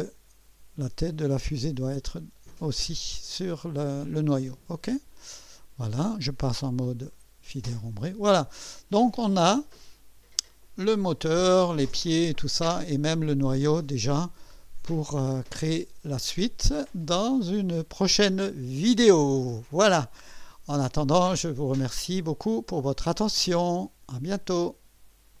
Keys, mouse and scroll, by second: 1.0 scroll up 1, 4.9 click, 6.9 2, 7.9-9.4 drag, 12.1-12.7 drag, 15.5 click, 16.4 click, 17.1-18.2 drag, 18.7 right click, 20.0 scroll up 1, 20.7 right click, 22.2 click, 24.1 right click, 25.3 click.